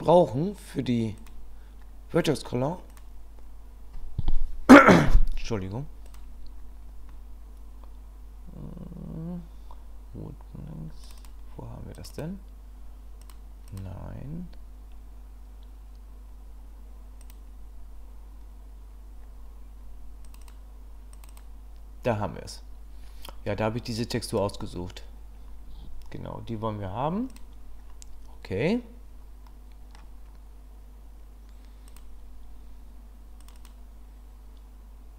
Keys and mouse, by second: 29.5 middle click, 31.9 click.